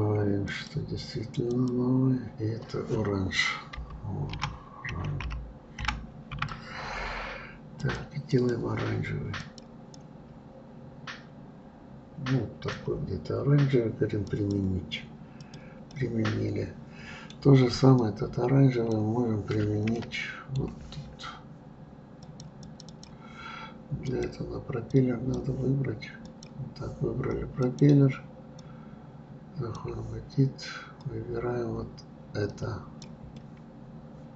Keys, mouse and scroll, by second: 0.4-4.5 drag, 8.3 click, 14.2 click, 15.4 click, 15.9-17.9 middle drag, 17.9-19.9 drag, 19.9-22.2 middle drag, 22.2 click, 24.0-26.4 drag, 27.6-30.6 drag, 31.0-33.3 drag, 33.3-34.3 middle drag.